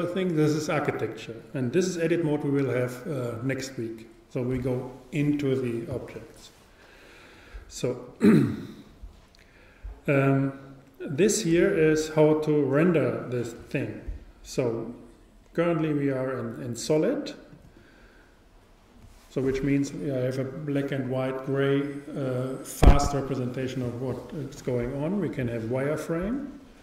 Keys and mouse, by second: 11.2-13.1 drag, 11.2 typing, 17.6-18.7 drag, 19.3 click.